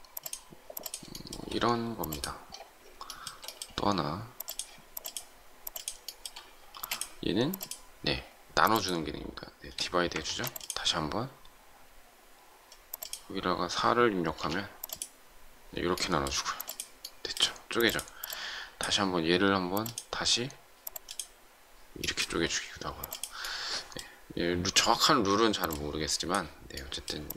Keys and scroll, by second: 6.7 shift+space, 10.1 ctrl+z.